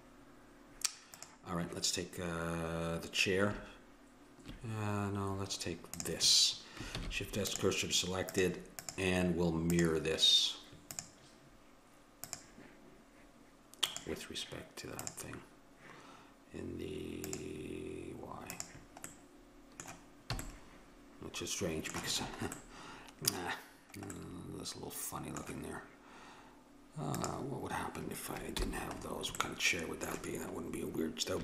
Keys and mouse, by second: 1.2-3.0 drag, 5.9-7.8 drag, 7.0 shift+s, 8.4-12.8 drag, 13.9-15.8 drag, 17.2-20.4 drag, 19.1-20.6 middle drag, 20.4 a, 27.1-29.0 drag, 28.6 h.